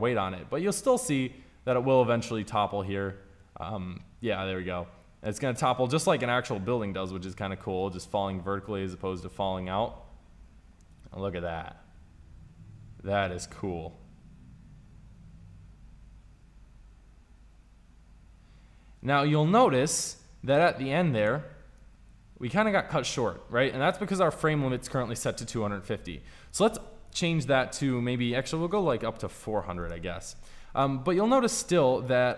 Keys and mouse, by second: 0.8 middle click, 4.5-5.8 middle drag, 21.6-23.0 drag, 26.9 middle click, 27.5 KP_0, 28.7 BackSpace, 28.8 BackSpace, 29.5 KP_0.